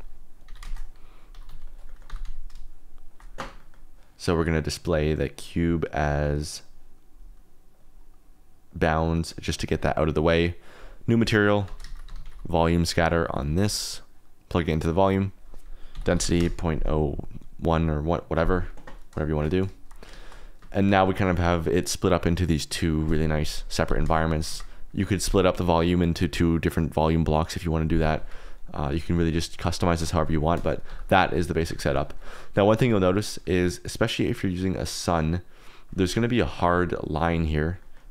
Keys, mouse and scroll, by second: 0.0-2.2 typing, 0.8 click, 1.6 click, 3.1 shift+click, 3.5 click, 4.6 click, 5.9 click, 6.5 click, 7.7 click, 8.7-9.6 drag, 10.7 click, 11.4 click, 11.6 x, 11.8 shift+a, 12.8 click, 13.1 alt+click, 13.5 click, 15.3-16.3 drag, 17.6 click, 20.1 shift+click, 20.7 shift+click, 24.3 s, 24.5 shift+z, 24.9-27.2 drag, 29.3 click, 30.4 click, 30.8 g, 31.6 Escape, 32.7 shift+click, 34.3 click, 35.5 click, 36.0 click, 37.8 middle click.